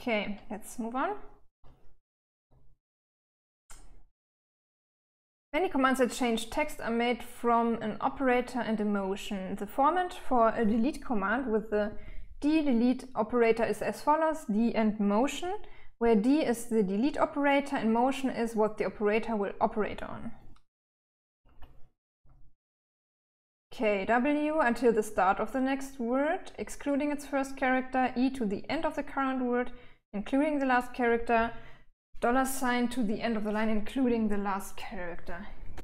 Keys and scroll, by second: 0.0-1.9 typing, 20.4-21.5 typing.